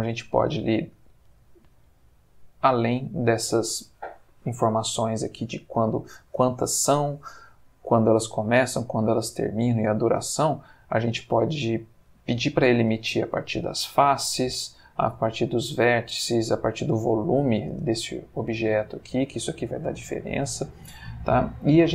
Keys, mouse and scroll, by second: 10.9 click, 14.1 click, 15.8 click, 16.6 click, 17.1 click, 17.7 space, 18.9 Escape, 21.3-21.9 middle drag.